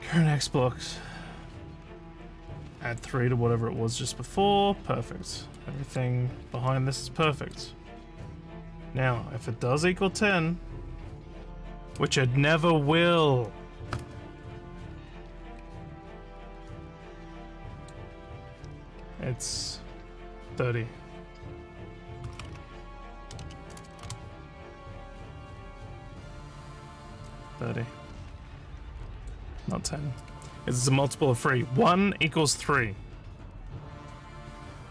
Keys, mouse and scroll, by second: 5.6 click, 6.7 middle click, 7.6 click, 17.6 click, 23.2 3, 29.1 click.